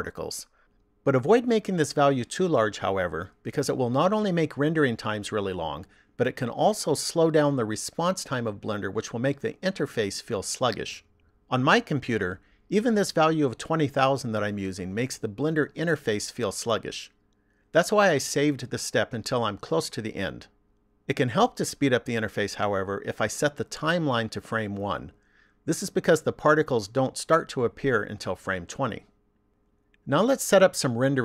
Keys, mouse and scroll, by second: 24.2 click.